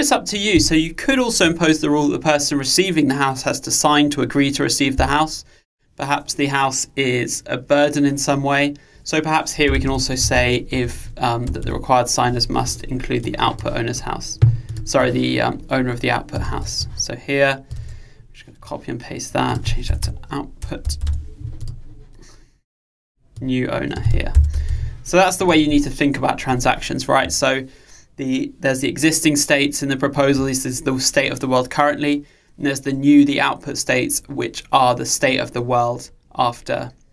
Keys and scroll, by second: 12.7 Escape, 16.5 super+c, 17.8 super+v.